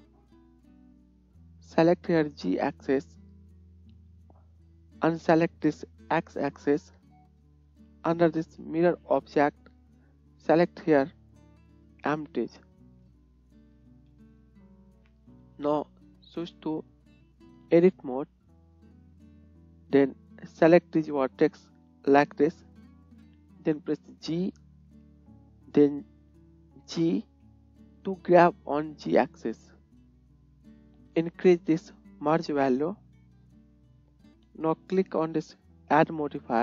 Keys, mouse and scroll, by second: 1.0 click, 2.9 middle click, 3.0-6.4 drag, 6.4 middle click, 6.6-9.8 drag, 9.8-13.9 middle drag, 13.3-13.9 drag, 13.3-13.9 right drag, 13.9 KP_1, 19.0 click, 21.6 click, 21.6 middle click, 21.6 right click, 24.1 g, 30.2-31.8 drag, 30.2 shift+z.